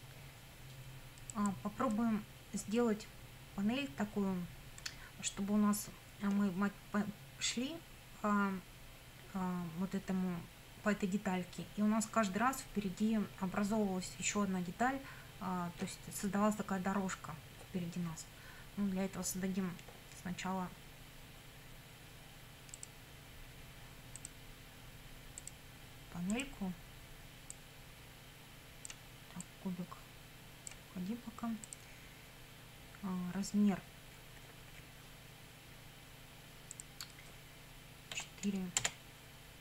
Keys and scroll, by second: 38.2 4, 38.8 Return.